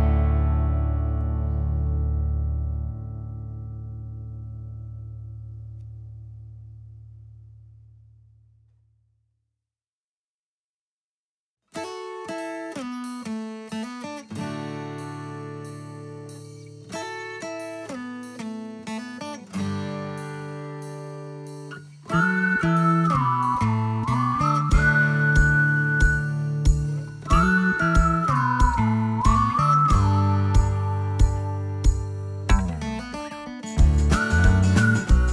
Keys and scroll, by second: 2.7 space, 5.2 space, 7.5 space, 9.0 Escape, 10.4 Escape, 20.9-21.8 typing, 25.2-25.6 typing, 26.5 Return, 26.9 space, 28.9 ctrl+g, 31.0 m, 32.9-33.9 typing, 34.7 Return, 34.9 space, 35.2 Escape.